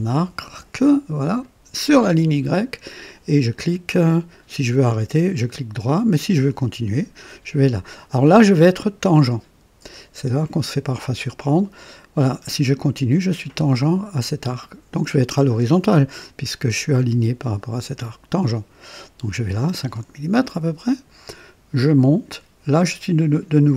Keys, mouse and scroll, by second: 1.4 click, 20.9 click.